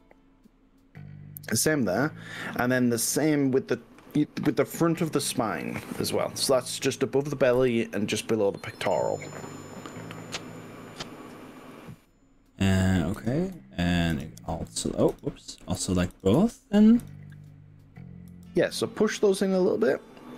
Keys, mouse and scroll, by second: 7.6 y, 10.6 click, 11.8 click, 13.2 drag, 14.2 shift+click, 15.2 click, 16.2 drag, 17.2 click, 18.4 g.